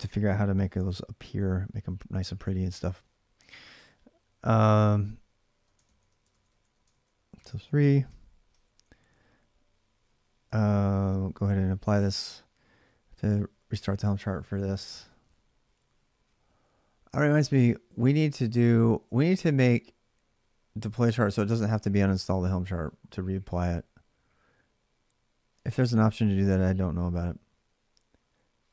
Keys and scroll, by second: 0.5 alt+Tab, 2.1 alt+Tab, 3.6 ctrl+[, 4.4 ctrl+a, 4.6-7.1 ctrl+a, 7.1 3, 7.9 ctrl+[, 8.3 typing, 9.8-10.6 typing, 10.9 Return.